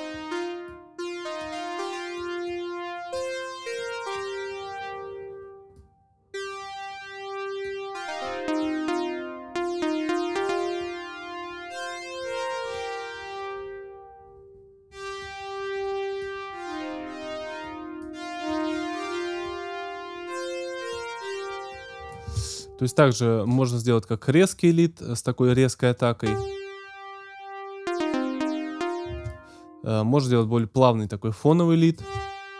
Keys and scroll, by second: 22.3 space, 26.2 space, 29.1 space, 31.9 space.